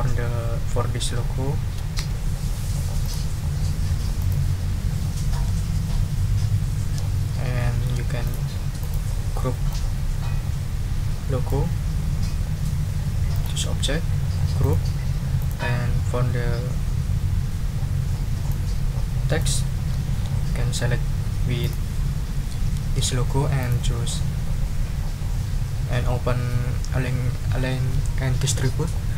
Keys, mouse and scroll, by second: 2.0 shift+d, 3.0 click, 4.2 click, 7.6 ctrl+click, 8.2 ctrl+shift+click, 8.8 shift+click, 9.7-11.7 drag, 13.3 click, 14.6 click, 15.4 click, 18.5-19.6 drag, 21.6 shift+click, 23.6 click.